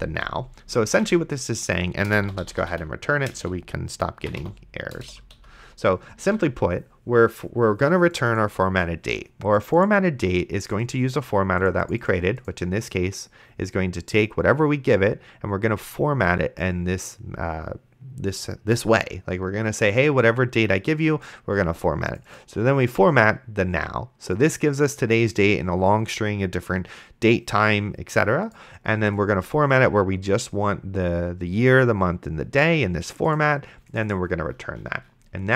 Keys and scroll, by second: 0.0-0.2 typing, 1.2 ctrl+s, 2.0-5.3 typing, 5.0 Return, 6.5 ctrl+s.